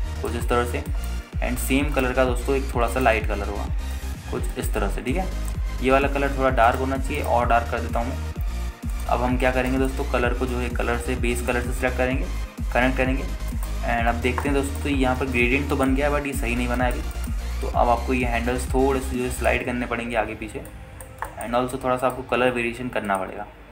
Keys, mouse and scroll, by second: 2.1 middle click, 3.1 click, 4.1 click, 6.3-6.7 scroll down 2, 6.6 scroll up 2, 7.9 click, 8.4 click, 10.7-11.4 scroll down 2, 10.9-11.4 middle drag, 11.7-12.9 drag, 14.7-15.0 middle drag, 15.0-16.0 scroll down 4, 15.6 alt+middle click, 16.1 scroll up 2, 16.6 shift+middle click, 17.3 scroll down 1, 18.0 middle drag, 18.3 shift+middle drag, 18.7 scroll up 2, 19.8-20.7 drag, 21.9-22.3 drag, 22.5 alt+shift+middle click, 23.2 click.